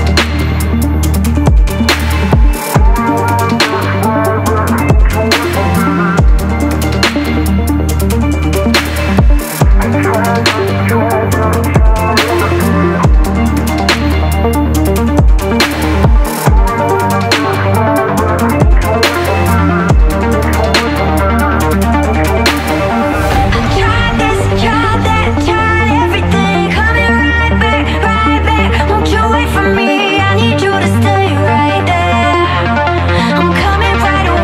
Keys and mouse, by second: 0.2-0.8 drag, 2.7 shift+d, 4.3 m, 5.9 click, 6.4-6.7 drag, 8.6 click, 10.5 middle click, 11.6 click, 12.6 ctrl+a, 14.7 Tab, 15.0 click, 16.4-17.6 drag, 19.5 ctrl+r, 28.1 KP_7, 29.0 alt+z, 30.7 shift+click, 32.4 p, 34.0 alt+z.